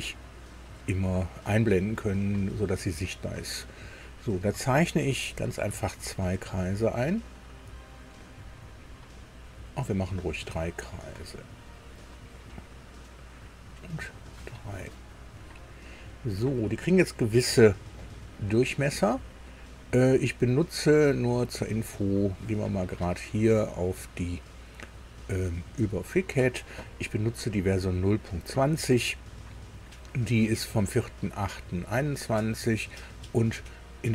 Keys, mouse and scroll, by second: 5.3 click, 7.7 click, 9.6 click, 10.9 click, 12.5 click, 14.1 click, 15.9 click, 16.7-17.0 scroll down 2, 17.2 scroll up 2, 18.0 right click, 21.2 click, 25.8 click.